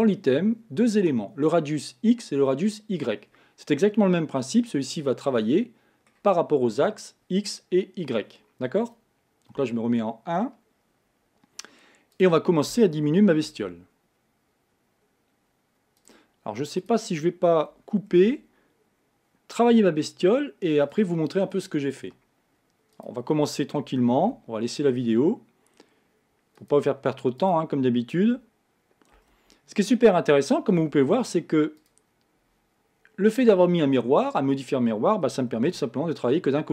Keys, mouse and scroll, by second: 5.4-8.4 middle drag, 9.6 KP_1, 12.2 click, 13.6 ctrl+a, 16.8 click, 18.1 ctrl+a, 23.0 click, 24.2 ctrl+a, 27.4 click, 29.2 ctrl+z, 30.8 Escape, 31.8-34.8 drag, 35.6 ctrl+a.